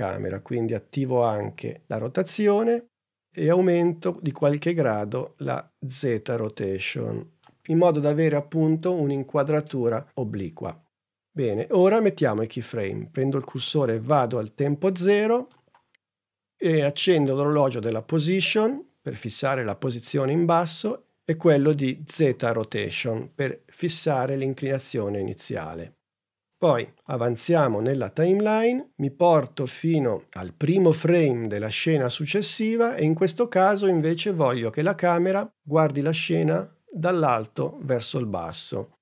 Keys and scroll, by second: 1.4 shift+r.